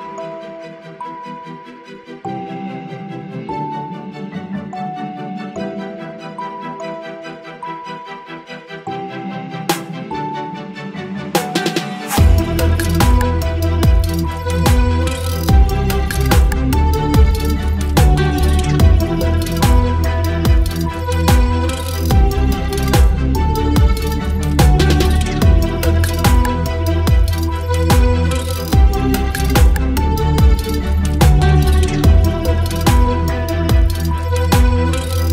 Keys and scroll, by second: 23.7 Return, 26.7 space, 28.7 space, 29.9 t, 33.2-35.3 typing.